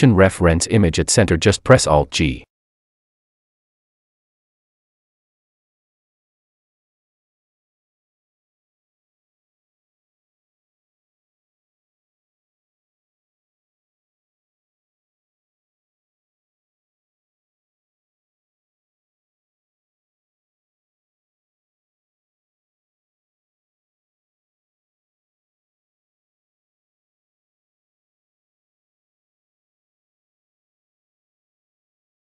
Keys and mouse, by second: 0.0 n, 1.4 click, 7.9 alt+g, 13.6-16.6 drag, 16.6 n, 17.6-25.0 drag, 25.7-28.7 drag.